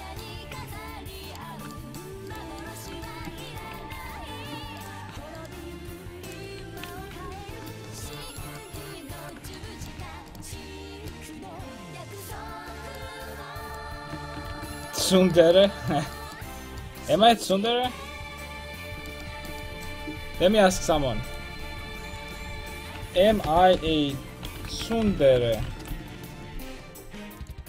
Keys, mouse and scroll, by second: 0.3 Tab, 0.7 alt+z, 3.8 ctrl+x, 4.2 ctrl+z, 6.6 ctrl+x, 6.8 a, 7.1 ctrl+t, 7.4 a, 12.3 ctrl+z, 13.9 ctrl+x, 14.2 a, 14.5 ctrl+t, 14.7 a, 18.1-21.0 middle drag.